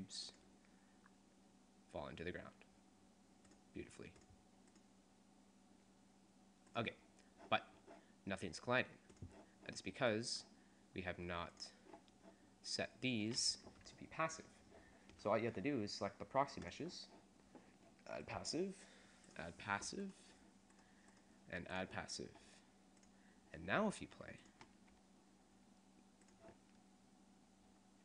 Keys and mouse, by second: 0.3 middle click, 3.5 click, 8.7 middle click, 9.9-10.9 drag, 11.7-13.0 drag, 13.0 right click, 13.6-15.0 drag, 15.6-18.4 middle drag, 19.0 right click, 20.1 right click, 20.3 click, 21.1 right click, 23.0 right click, 23.4-25.6 drag.